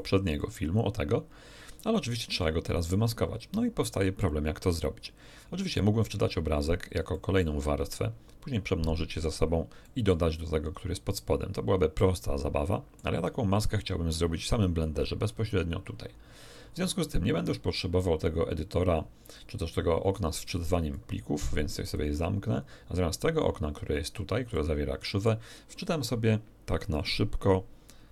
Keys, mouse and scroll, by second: 0.4-2.1 drag, 2.6 right click, 7.1 middle click, 9.8 middle click, 12.0-13.2 middle drag, 20.9-22.1 drag, 24.5 middle click.